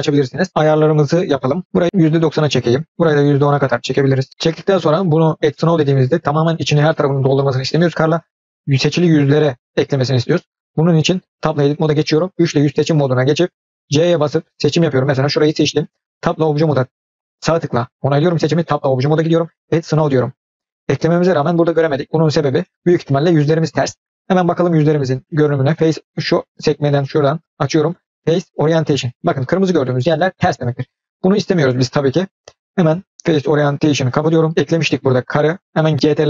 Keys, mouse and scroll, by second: 1.7 click, 3.0-4.3 drag, 8.7 click, 11.4 Tab, 12.3 3, 14.0 c, 18.6 Tab, 19.6 click, 24.5-26.6 drag, 26.8-28.8 drag, 33.1-34.1 drag.